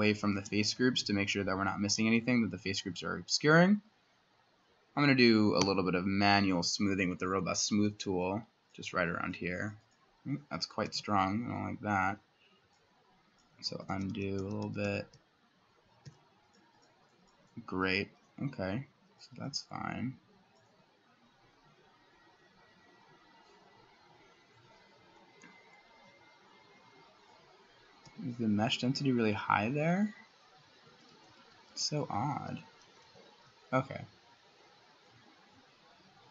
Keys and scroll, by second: 5.6 2, 7.2-8.0 typing, 10.9 ctrl+z, 13.7 ctrl+z, 16.1 2, 25.2-26.1 ], 28.1 w, 30.7 ctrl+z, 30.9 ctrl+z.